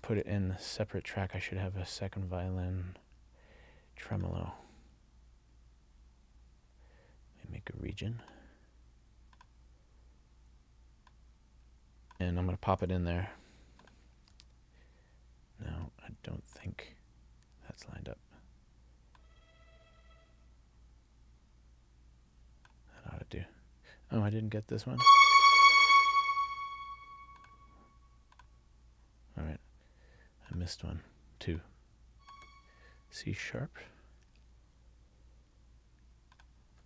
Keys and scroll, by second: 0.1 super+x, 14.3 super+v.